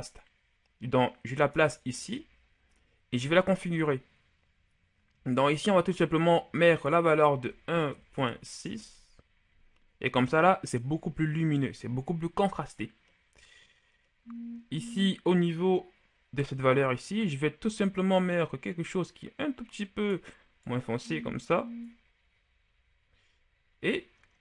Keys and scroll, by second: 7.3 KP_1, 7.8 KP_Decimal, 8.1 KP_6, 8.8 Return.